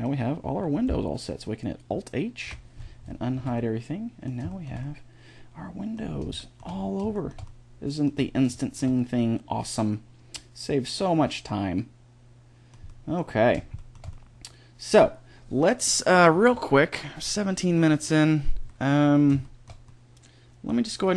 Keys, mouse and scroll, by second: 2.3 alt+h, 3.2 a, 12.7-20.3 middle drag, 20.9-21.1 right drag.